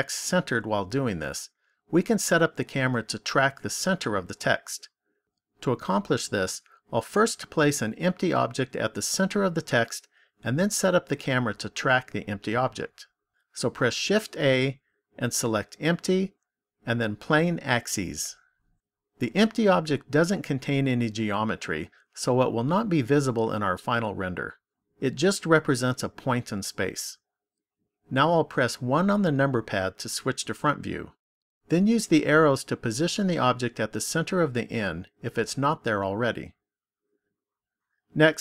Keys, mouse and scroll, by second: 13.9 shift+a, 28.7 KP_1, 32.6 click, 36.4 click.